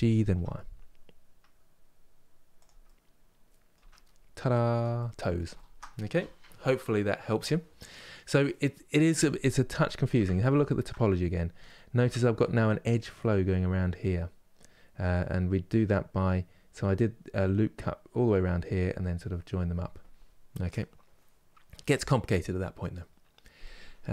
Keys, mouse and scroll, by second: 2.5 middle click, 3.5 Tab, 3.8 scroll down 1, 4.7-9.9 middle drag, 9.9 Tab, 10.2 shift+middle click, 10.7 scroll up 2, 11.3-24.1 shift+middle drag.